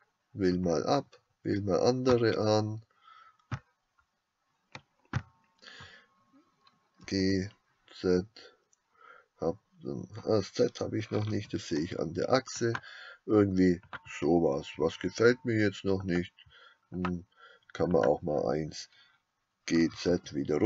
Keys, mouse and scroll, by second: 0.0-2.4 drag, 7.1 g, 14.0 click, 17.9 click, 19.8 g.